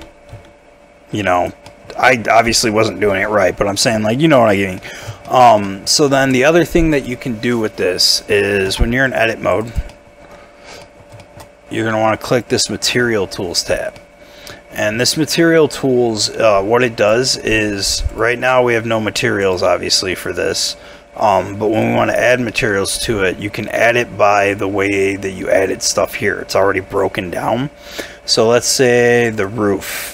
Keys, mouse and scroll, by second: 0.0 y, 0.3 x, 1.3 right click, 1.7 middle click, 2.1 scroll down 1, 2.3 middle click, 3.1 Tab, 3.8 middle click, 5.3 shift+middle click, 8.7 Tab, 9.5 double click, 9.9 middle click, 10.5 scroll down 1, 10.8 middle click, 11.2 shift+middle click, 13.9 middle click, 22.5 middle click, 23.4 scroll up 1, 23.7 middle click, 25.1-26.3 scroll down 1, 26.5-28.0 scroll up 1, 28.0-28.4 scroll down 1, 28.4-30.1 scroll up 1.